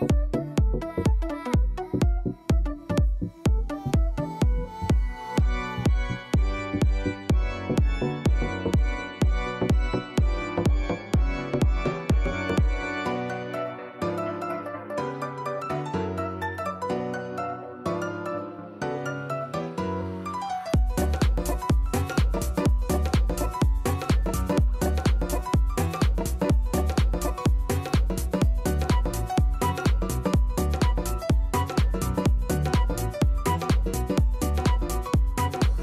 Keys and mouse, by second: 5.8 alt+right click, 6.0 alt+click, 7.3 alt+click, 7.5 alt+right click, 7.9 alt+middle click, 8.1 alt+right click, 9.2 click, 10.6 click, 11.5 click, 12.3 click, 12.5 click, 13.2 click, 15.1 click, 18.9 click, 19.6 KP_0, 20.2 right click, 20.3 alt+click, 21.2 alt+right click, 21.4 alt+click, 22.0 alt+right click, 22.4 alt+click, 23.5 click, 27.5 KP_5, 28.5-29.5 alt+drag, 29.7 click, 30.2 click, 30.8 alt+right click, 31.0 alt+click, 31.2 alt+middle click, 31.5 alt+click, 31.7 alt+middle click, 31.9 alt+click, 32.1 alt+right click, 33.7 click.